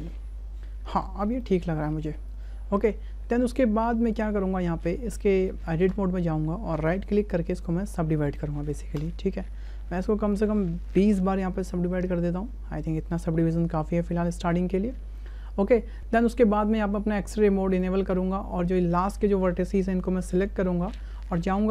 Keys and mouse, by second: 0.1 click, 1.4 shift+click, 2.3-3.5 drag, 4.1 shift+click, 5.9 Tab, 7.1 click, 8.3-9.1 drag, 10.3-12.4 drag, 13.2 shift+click, 17.7 click, 19.2-20.5 drag.